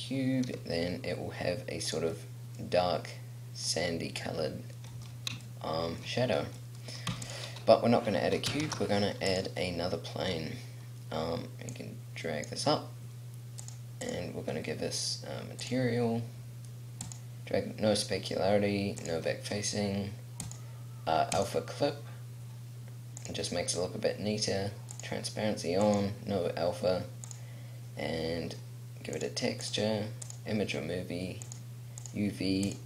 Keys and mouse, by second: 0.6 g, 2.3 middle click, 5.8 middle click, 6.4 middle click, 6.8 middle click, 7.3 x, 8.8 shift+a, 12.1-14.9 drag, 23.4-29.4 drag.